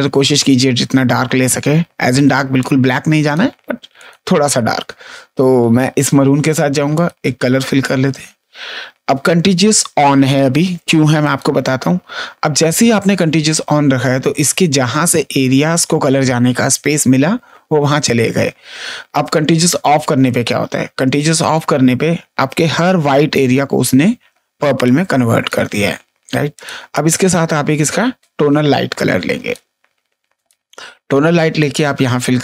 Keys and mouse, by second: 2.5 click, 3.9 click, 6.9 click, 11.2 click, 19.7 ctrl+z, 20.2 click, 21.3 click, 24.5 space, 24.8 click, 26.5 click, 28.1 click, 30.3 click, 31.5 click.